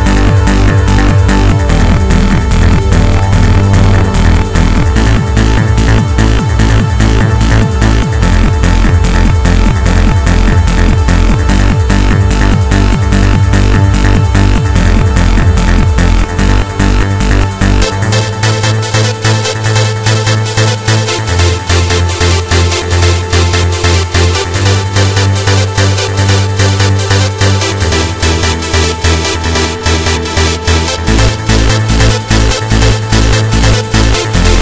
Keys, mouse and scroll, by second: 5.0 click, 10.9-11.3 scroll up 1, 11.6-12.3 scroll up 3, 12.9 click, 12.9 scroll up 1, 19.0-19.3 scroll down 1, 19.8 n, 20.8 t, 21.6-21.9 scroll down 2, 22.5 middle click, 24.5-25.1 scroll up 2, 25.7 shift+middle click, 27.2 middle click, 28.2 KP_1, 29.6 right click, 30.8 g, 33.2 click, 34.2 s.